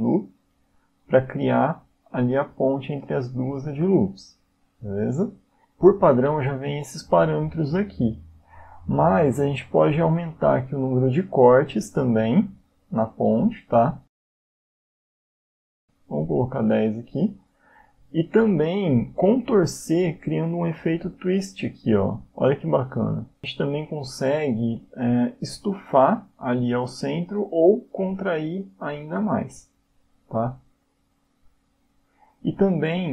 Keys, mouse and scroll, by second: 11.4 click, 17.5 click, 20.8 click, 26.6 click.